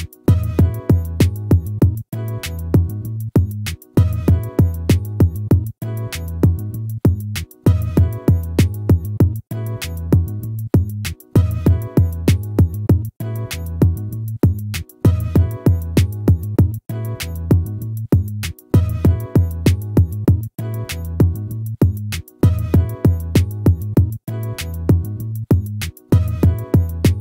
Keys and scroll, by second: 6.7 ctrl+-.